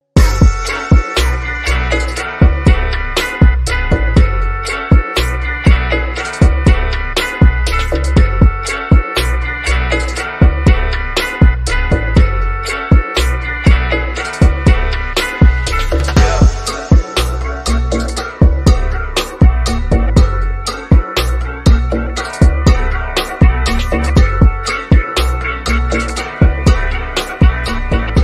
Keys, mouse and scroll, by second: 0.1-3.2 drag, 3.2 scroll down 1, 9.2-11.0 drag, 11.0-11.9 scroll down 1, 12.9-15.5 drag, 15.5-16.1 scroll down 1, 16.8 scroll up 1, 16.9 shift+middle click, 17.6 scroll up 1, 20.0 click, 24.8 click, 27.0-28.0 scroll down 1.